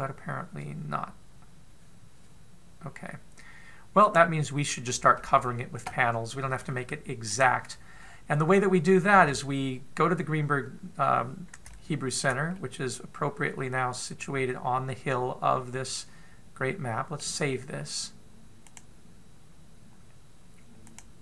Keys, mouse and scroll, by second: 8.6-9.0 scroll up 4, 9.0-9.8 scroll down 1, 9.8 scroll down 3, 10.8-11.8 scroll up 1, 12.2 shift+middle click, 13.1 middle click, 19.2 click.